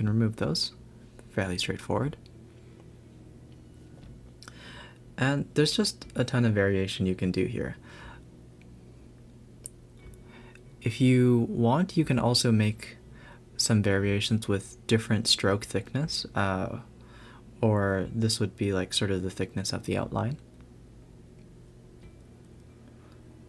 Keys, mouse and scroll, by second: 0.0-0.5 scroll down 1, 0.5 click, 0.9 shift+d, 2.1 Tab, 2.7 ctrl+r, 4.3 ctrl+r, 5.5 click, 5.8 x, 7.8 b, 8.7 x, 9.3 Tab, 10.5 r, 13.9 a, 14.0 a, 14.5 click, 16.6 click, 18.3 shift+d, 20.6 Tab.